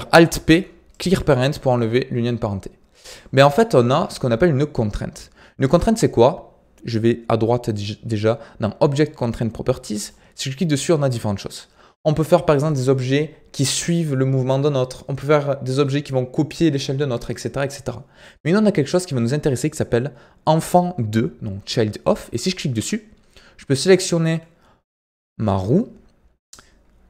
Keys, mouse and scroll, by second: 0.1 alt+p, 3.0-8.6 drag, 24.1 click, 26.3-27.0 scroll down 4.